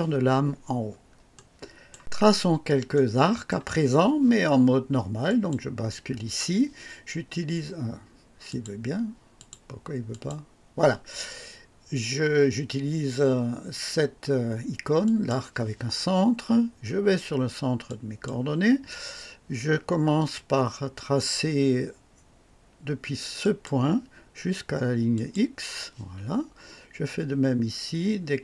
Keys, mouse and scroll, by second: 0.8 scroll down 2, 1.3-2.0 right drag, 2.3 scroll up 2, 2.9-3.7 right drag, 5.2 click, 8.5 click, 9.3 click, 10.1 click, 15.0 click, 17.8 click, 23.4 click, 25.1 click.